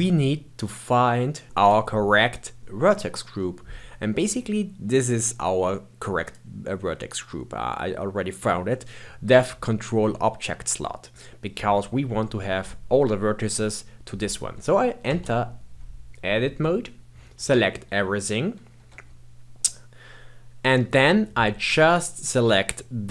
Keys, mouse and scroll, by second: 1.6-2.6 drag, 3.2-5.2 scroll up 5, 5.2-6.2 scroll up 1, 6.2 click, 15.0 Tab, 17.3 a, 18.7 1, 22.1 click.